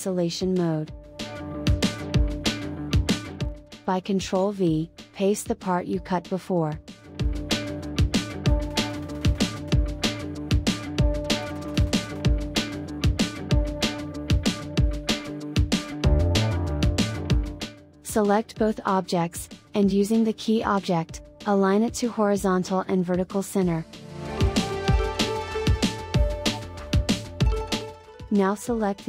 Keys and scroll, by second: 4.1 ctrl+v.